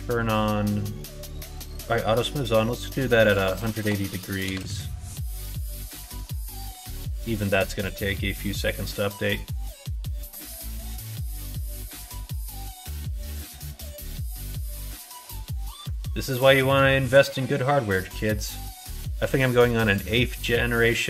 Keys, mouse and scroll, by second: 0.7 click, 2.5-21.0 drag.